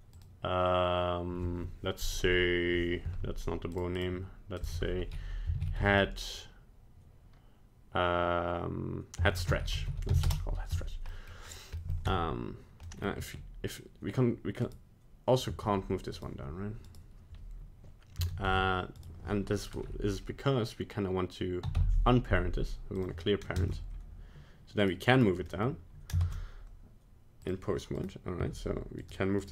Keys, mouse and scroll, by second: 0.1 click, 3.9 click, 4.5 click, 11.0 middle click, 11.4 scroll down 1, 11.8 middle click, 11.8 middle click, 12.1 Tab, 12.8 middle click, 13.0 middle click, 13.1 g, 15.4 g, 16.9 right click, 18.5 Tab, 18.9 right click, 21.7 alt+p, 23.6 ctrl+Tab, 25.1 right click, 25.4 middle click, 26.1 ctrl+Tab, 28.0 right click, 28.4 g, 29.4 right click.